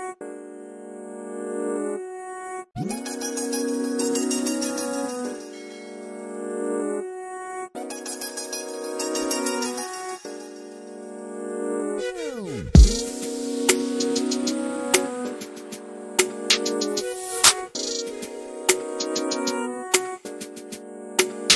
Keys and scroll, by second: 3.7 m, 5.1-6.1 typing, 10.1 Delete, 13.1 f, 14.8 typing, 16.3-18.4 typing.